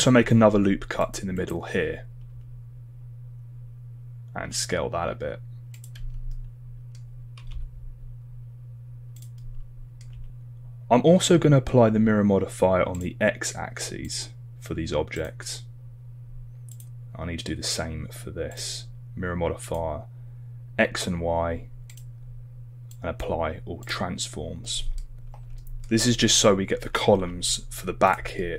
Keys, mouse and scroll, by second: 25.6 shift+middle drag, 28.1 shift+g, 28.4 middle drag.